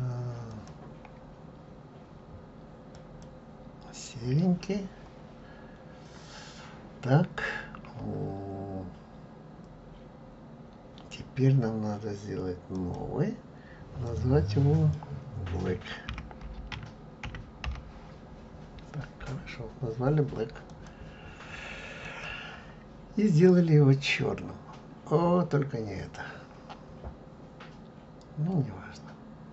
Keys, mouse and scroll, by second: 0.8-5.8 drag, 5.8-8.0 scroll down 1, 8.0-9.9 scroll up 1, 13.0-20.8 drag, 23.5 click.